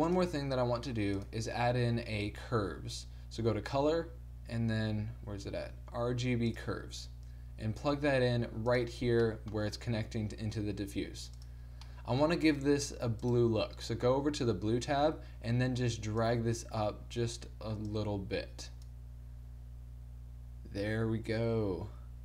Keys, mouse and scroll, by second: 2.3 click, 2.3 shift+a, 8.8-10.5 drag, 10.5 middle click, 10.7-13.2 drag, 10.7 g, 13.2 middle click, 14.2 click, 15.1-22.2 middle drag.